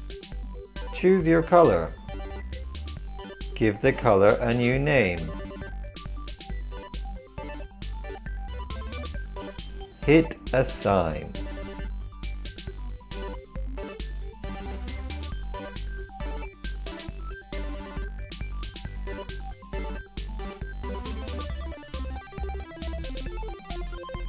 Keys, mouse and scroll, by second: 6.7 e, 10.2-12.5 drag, 12.5 ctrl+l, 13.6-19.8 drag, 19.8 ctrl+l, 20.5-23.0 drag.